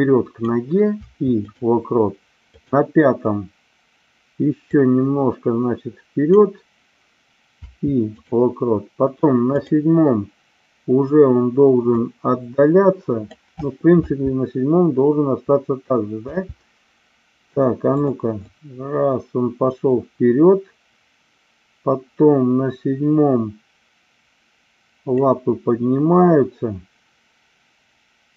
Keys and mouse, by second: 2.6 click, 4.7-6.3 drag, 9.4 click, 11.9-13.3 drag, 14.0 space, 17.9 click, 18.4-25.2 drag.